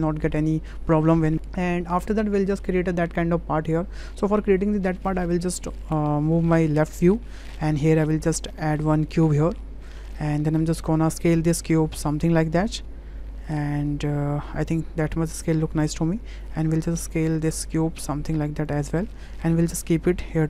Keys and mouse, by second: 1.7 click, 7.4 shift+middle click, 8.1 shift+a, 11.2 click, 12.2-15.4 drag, 15.8-16.6 middle drag, 17.4-18.7 drag, 19.0 w, 19.7 click.